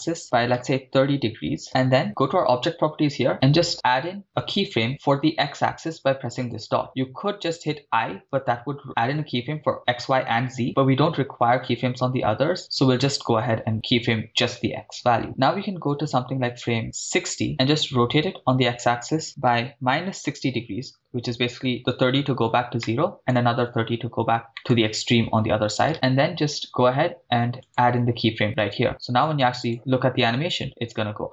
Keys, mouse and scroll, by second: 0.2 3, 1.6 0, 1.6 Return, 2.5 click, 4.9 ctrl+z, 6.5 click, 15.2-16.0 scroll down 2, 16.9 click, 17.9 r, 18.2 x, 19.5 -, 20.3 6, 20.4 0, 21.0 Return, 22.9 middle click, 24.5 middle drag, 25.9 ctrl+z, 27.6 click, 28.9-29.7 drag, 29.7 shift+space.